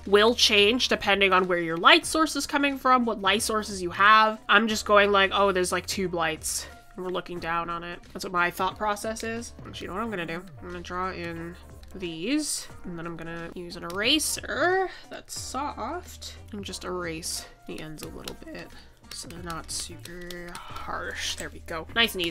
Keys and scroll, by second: 2.0 ctrl+z, 5.8 ctrl+z, 12.0 ctrl+z.